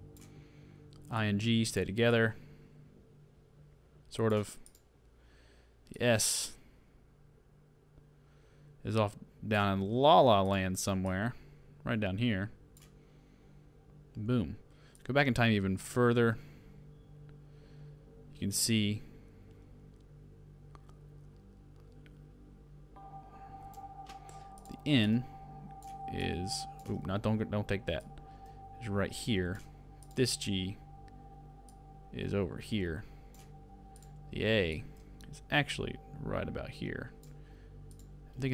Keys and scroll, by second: 27.1 super+z.